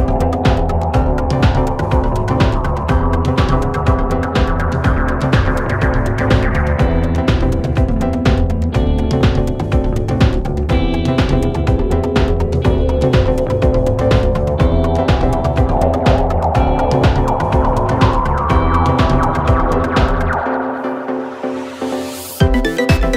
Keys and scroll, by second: 1.4-2.0 typing, 2.1 Return, 6.5 F9, 8.7 F1, 12.7 F9, 17.0 ctrl+d, 17.2 Escape, 19.6 F1, 21.8 F1, 21.9 F2.